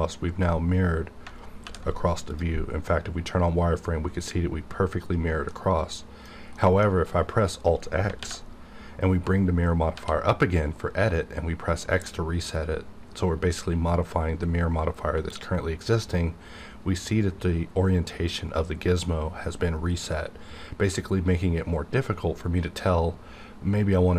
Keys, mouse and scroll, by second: 1.6 alt+v, 2.3 click, 5.5 middle click, 8.2 alt+x, 9.9 x.